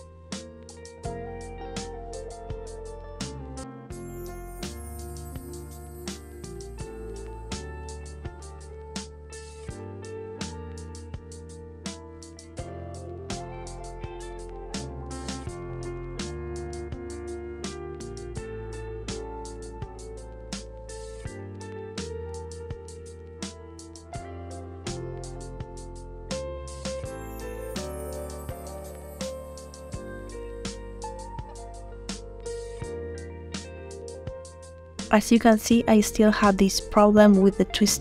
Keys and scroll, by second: 11.1 ctrl+z, 14.5 ctrl+z.